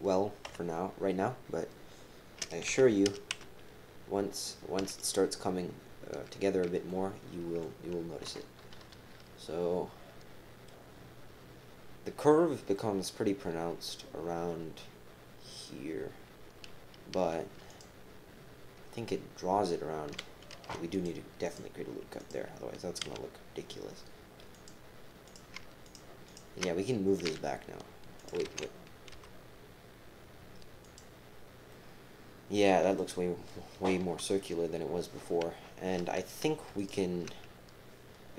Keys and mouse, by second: 0.4 KP_7, 2.7 g, 6.9 click, 8.2 KP_7, 8.9 KP_3, 10.2 middle click, 17.7 click, 20.5 ctrl+r, 22.2 click, 23.0 g, 25.2 click, 27.2 e, 28.4 ctrl+z, 29.1 g, 31.7-33.5 drag, 34.2 KP_3, 36.2 click.